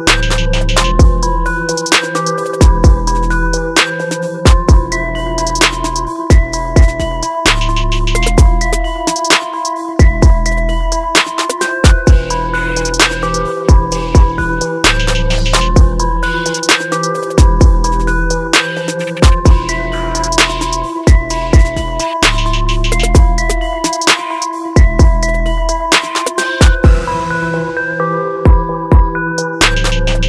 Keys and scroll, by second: 2.0 shift+F5, 6.2 ctrl+=, 25.9 shift+F5, 28.2 ctrl+=.